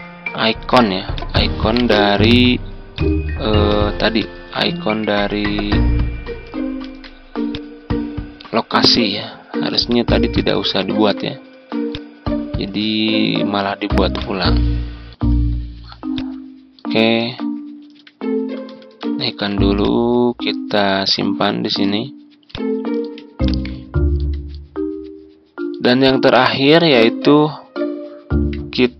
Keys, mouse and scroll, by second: 1.6 right click, 2.9-6.2 drag, 6.8 ctrl+d, 7.4 click, 11.4 Delete, 11.9-13.2 drag, 12.6 Delete, 14.1-15.2 drag, 15.2 Delete, 16.0 click, 17.7 ctrl+g, 18.9 Home, 19.7 click, 21.1-21.5 ctrl+scroll up 1, 22.4 ctrl+click, 23.4 ctrl+click, 24.4 click, 26.7-27.0 ctrl+scroll down 1, 27.5 ctrl+scroll down 1, 28.1-28.9 ctrl+scroll down 1.